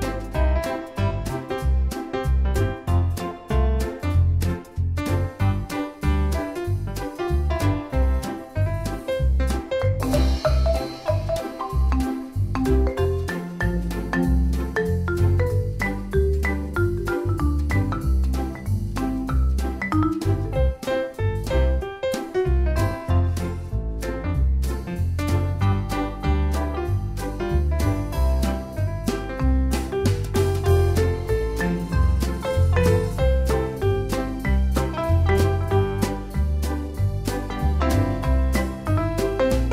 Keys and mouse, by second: 2.0 click, 3.3 click, 6.9 click, 13.0 click, 18.5 click, 27.0 click, 29.7 click, 34.9 click, 38.2 click.